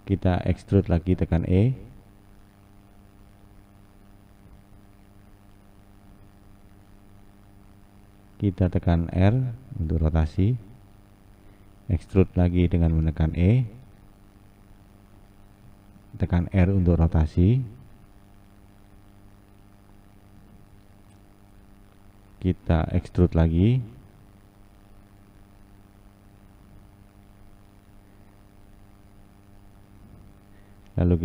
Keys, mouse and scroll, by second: 2.7 e, 9.1 r, 12.0 e, 16.2 r, 19.3 click, 23.0 r, 24.7 e, 28.3 r.